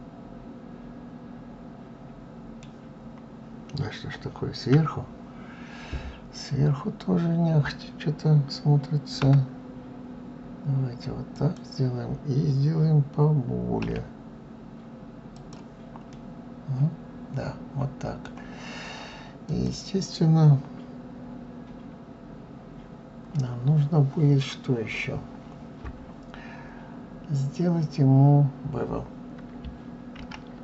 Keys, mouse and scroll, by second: 2.6-4.5 scroll down 3, 4.5 KP_7, 5.9-6.6 scroll up 2, 9.0 g, 15.9-18.9 middle drag, 19.2 click.